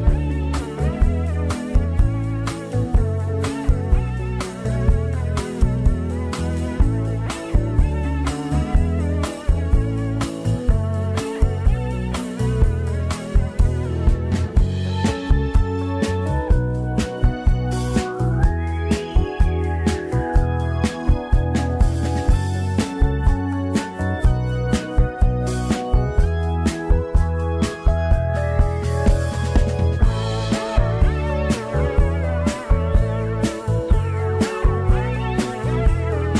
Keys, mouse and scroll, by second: 2.2-3.9 shift+middle drag, 3.9-7.0 drag, 9.2-9.8 scroll down 8, 11.2 3, 12.1 click, 13.5 Tab, 13.8 click, 14.2 Tab, 15.0 3, 15.4 click, 15.8 c, 19.5 Delete, 20.5 Tab, 20.8 click, 21.1 Tab, 22.0 click, 22.4 c, 26.2 Delete, 26.8 Tab, 27.4 click, 28.1 shift+click, 29.9 ctrl+j, 30.6 scroll up 5, 31.0 Tab, 31.6 1, 32.3 click, 34.3 click, 36.2 m.